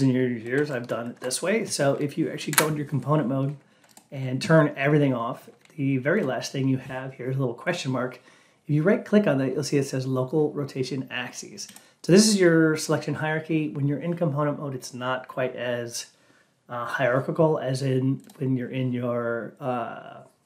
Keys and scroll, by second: 2.4 F8.